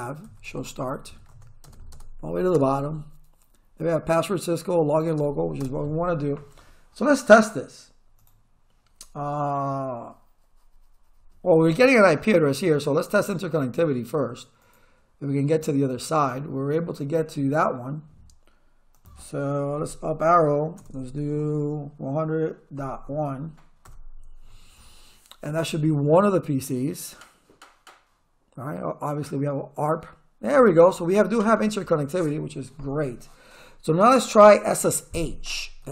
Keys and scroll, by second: 0.0-1.6 typing, 5.2 space, 19.8 Up, 20.8 BackSpace, 22.8 ., 23.1 1, 23.9 Return, 35.8 s.